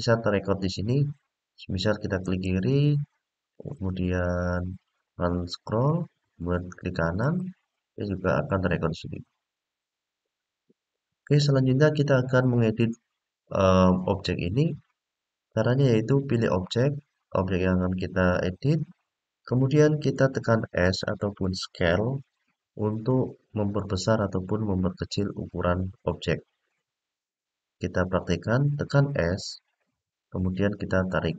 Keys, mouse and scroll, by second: 2.0 click, 3.5-5.6 middle drag, 7.0 right click, 8.9-10.0 scroll down 2, 14.2 click, 15.3 scroll down 2, 15.6-16.8 scroll up 3, 16.8-17.7 scroll down 1, 29.7-31.3 s.